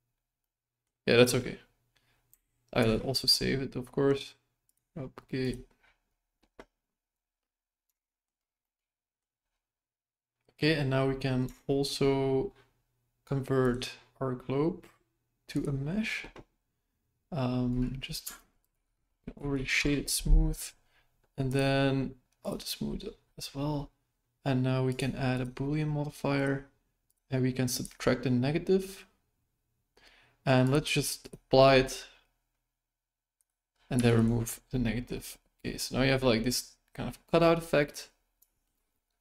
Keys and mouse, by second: 0.4 middle click, 2.9 ctrl+s, 7.9-8.3 shift+middle drag, 8.7 middle click, 11.5-11.9 shift+middle drag, 13.6-15.6 drag, 18.2 space, 19.5 Down, 22.4 click, 25.4-26.4 drag, 27.1-29.3 drag, 30.6-32.8 drag, 33.3 click, 33.9 x, 35.1-35.5 middle drag, 36.2-37.5 middle drag, 38.4 shift+middle click.